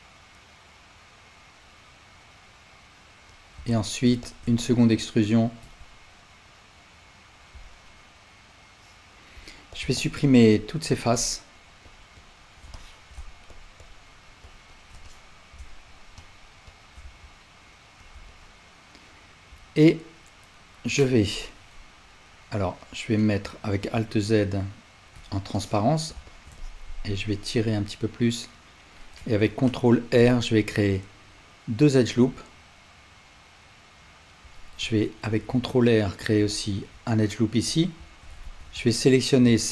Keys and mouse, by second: 4.3 shift+click, 4.7 ctrl+click, 5.6 e, 7.6-9.8 alt+drag, 10.2 shift+click, 10.6 shift+click, 10.9 shift+click, 11.8 shift+click, 12.2 shift+click, 12.7 alt+click, 13.8 shift+click, 14.7 shift+click, 15.0 alt+click, 16.2 shift+click, 17.0 x, 18.3-37.8 alt+drag, 23.9 alt+z, 25.2 1, 29.5 ctrl+r, 35.2 ctrl+r, 38.4 alt+z, 38.9-39.7 drag.